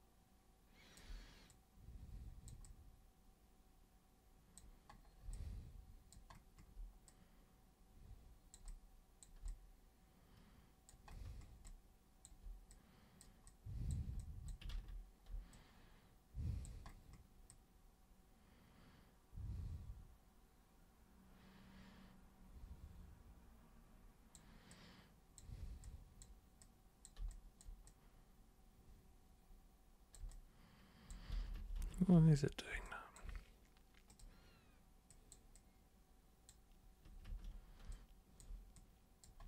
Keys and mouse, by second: 1.5-2.5 super+drag, 2.6-4.6 super+drag, 5.3 alt+super+click, 7.0-8.5 super+drag, 8.6 super+click, 9.4-10.9 alt+super+drag, 11.7 alt+super+click, 12.7 super+click, 13.4 super+click, 14.2 alt+super+click, 15.5-16.6 alt+super+drag, 17.4-24.3 alt+super+drag, 24.7 alt+super+click, 25.8 super+click, 26.6 super+click, 27.2 alt+super+click, 27.8-30.1 super+drag, 30.3 alt+super+click, 31.5 ctrl+super+z, 31.8 ctrl+super+z, 32.1 ctrl+super+z, 32.8 alt+super+click, 34.1 super+click, 35.1 super+click, 35.5 super+click, 37.3 ctrl+super+z, 37.9 alt+super+click, 38.7 super+click.